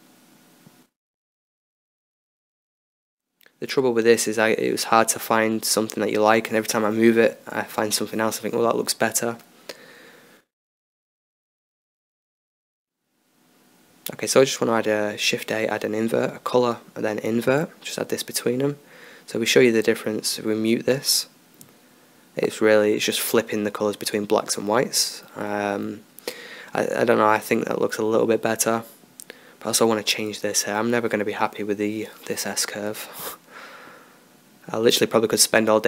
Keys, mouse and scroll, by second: 0.2 drag, 0.5 drag, 0.9-2.6 drag, 2.7-3.2 drag, 3.4-4.0 drag, 4.8-5.4 middle drag, 9.7-11.7 drag, 11.7 shift+a, 13.9 shift+a, 15.0 click, 21.7 m, 23.1 m, 23.7 m, 24.2 m, 30.7-32.2 drag, 32.3-35.8 drag.